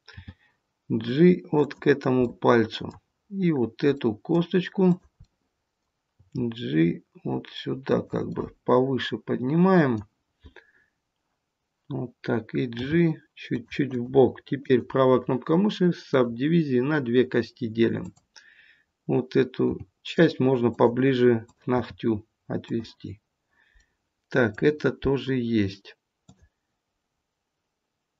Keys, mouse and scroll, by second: 0.1 g, 2.2 middle click, 3.9 middle click, 4.7 click, 5.2 middle click, 6.2 g, 8.1 middle click, 12.7 g, 13.8 click, 14.5 right click, 17.9 click, 19.6 g, 21.4 click, 21.8 g, 23.7 middle click, 24.0 middle click, 26.2 click.